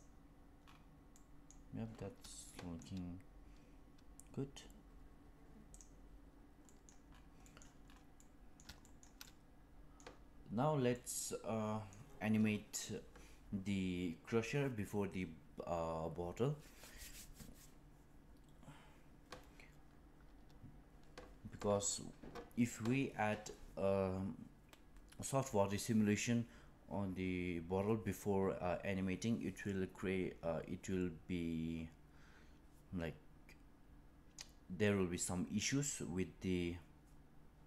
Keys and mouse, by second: 1.1-1.5 middle drag, 2.4-2.8 shift+middle drag, 6.7 middle click, 7.4 middle click, 8.1 middle click, 8.8 shift+middle click, 9.1-9.9 middle drag, 10.8-11.8 middle drag.